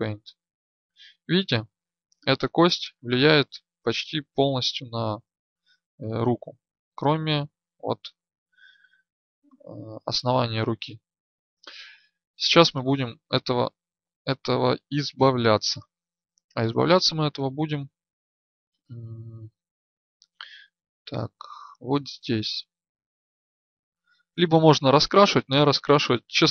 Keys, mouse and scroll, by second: 2.0 right click, 14.1-17.5 drag, 20.7-24.2 drag.